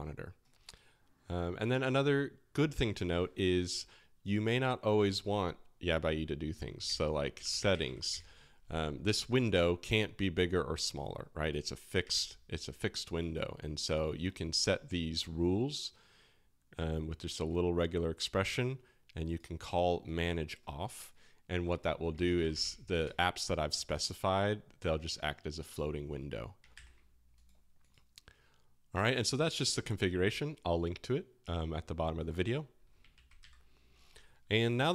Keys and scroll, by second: 3.8 typing, 6.8 super+space, 7.1-8.3 typing, 22.1 super+space, 22.1-23.1 typing, 26.7 super+w, 33.2 ctrl+w, 33.4 c.